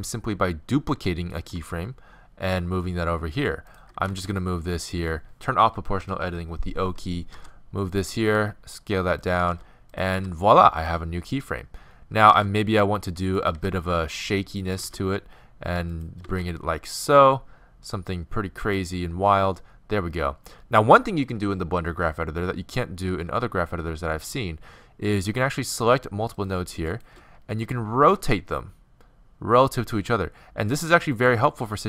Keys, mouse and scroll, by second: 1.4 shift+d, 4.1 r, 6.0 o, 7.4 r, 8.3 s, 10.1 r, 10.1 g, 12.4 shift+d, 13.6 shift+d, 25.2-28.7 right drag, 28.1 r, 28.7 middle click.